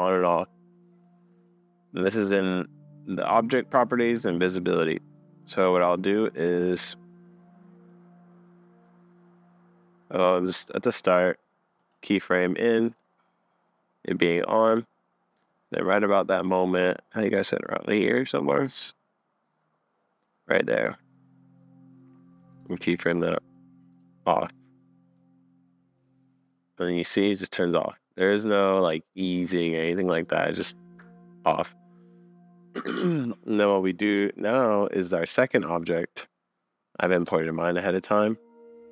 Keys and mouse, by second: 10.5-11.8 middle drag, 13.0-14.4 middle drag, 14.5 middle click, 15.5 middle click, 17.5 middle click, 20.1 click, 22.5 click, 25.2-26.3 drag, 33.7-35.5 middle drag, 37.2 middle click, 37.6 middle click.